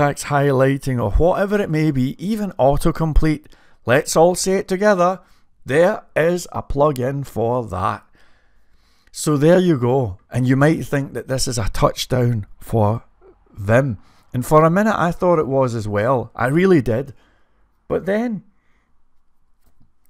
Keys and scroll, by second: 0.0-0.4 typing.